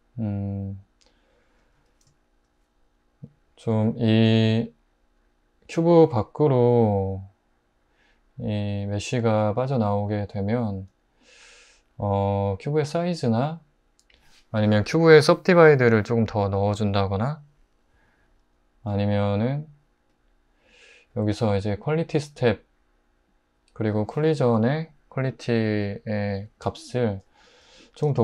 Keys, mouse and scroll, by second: 1.8 '.